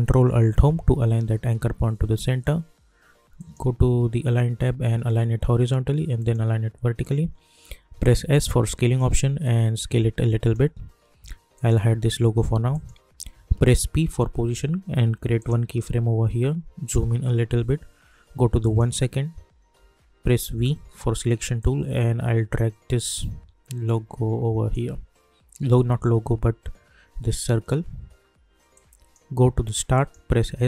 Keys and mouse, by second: 0.5 ctrl+alt+Home, 3.3 click, 6.1 click, 8.2 s, 9.1-11.5 drag, 14.1 p, 15.4 click, 16.8 =, 17.0 =, 18.6 click, 20.5 v, 21.6-26.9 drag, 28.7 click, 30.4 s.